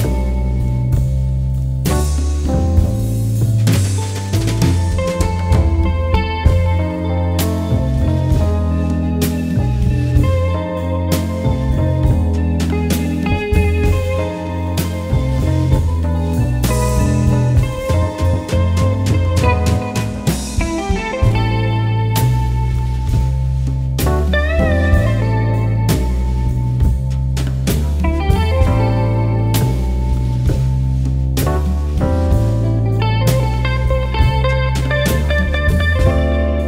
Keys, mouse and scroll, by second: 0.9-1.4 alt+scroll down 1, 2.0 alt+scroll up 1, 5.4 click, 8.1-14.2 drag, 17.4 ctrl+Num_Lock, 17.8 ctrl+i, 20.0 click, 21.9 click, 24.2 click, 25.2-26.8 typing, 26.9 click, 34.0-34.8 typing, 34.9 click, 36.5-36.6 typing.